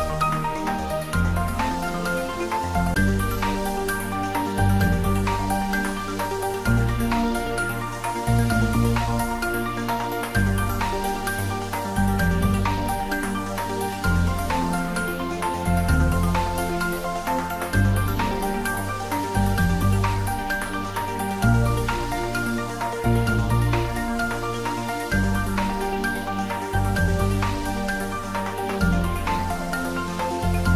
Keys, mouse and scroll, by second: 0.4 Tab, 1.9-3.9 middle drag, 3.9 Tab, 5.3 Tab, 5.7-6.1 scroll down 1, 6.6 ctrl+r, 7.0 click, 9.0-10.6 middle drag, 10.6 ctrl+e, 11.4 click, 12.1 ctrl+r, 12.7 click, 15.2 ctrl+r, 15.8 click, 20.5 click, 20.9 ctrl+z, 21.9 scroll down 1, 22.9 Tab, 23.3-23.9 scroll up 1, 24.1 shift+z, 24.5-25.2 scroll up 1, 25.3 shift+z, 25.8-27.9 middle drag, 27.9 ctrl+r, 28.9 Tab, 29.9 ctrl+r, 30.3 click.